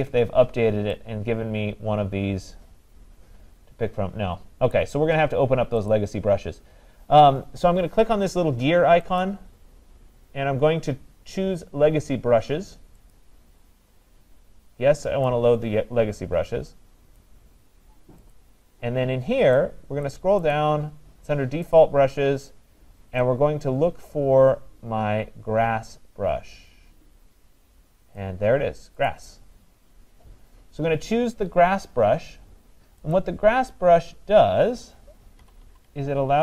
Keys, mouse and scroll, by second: 4.7 click, 5.9 click, 9.2 click, 13.1 click, 17.2 click, 18.3 click, 20.1 click, 20.6 click, 21.8 click, 28.2 click, 29.1 click, 33.1 click, 35.4-36.4 typing.